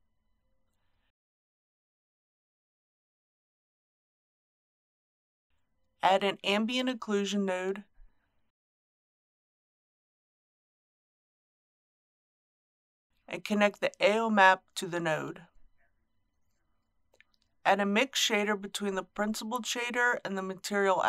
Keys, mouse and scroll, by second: 7.1 shift+a, 9.4-15.8 drag, 16.1-17.8 middle drag, 18.1-19.8 drag.